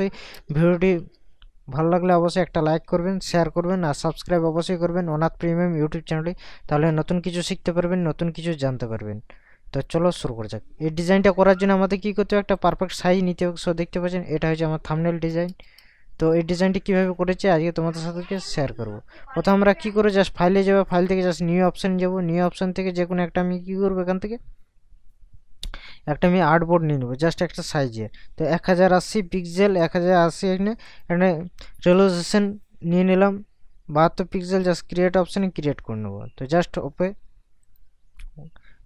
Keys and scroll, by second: 0.4 ctrl+KP_Add, 2.1 ctrl+KP_Subtract, 15.5 ctrl+KP_Add, 16.3 ctrl+KP_Subtract.